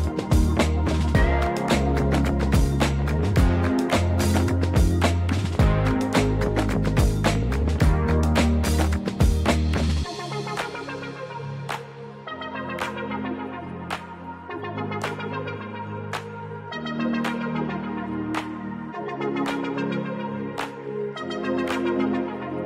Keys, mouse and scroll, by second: 0.1 x, 0.5 y, 2.2 click, 2.5 g, 2.8 y, 4.2 click, 5.4 Tab, 6.5 ctrl+2, 7.1 Tab, 8.0 ctrl+r, 11.5 click, 12.1 ctrl+r, 12.9 right click, 13.2 Tab, 13.7 click, 13.7 right click, 14.6 click, 15.8 click, 16.3-18.2 drag, 19.2 click, 21.6 click.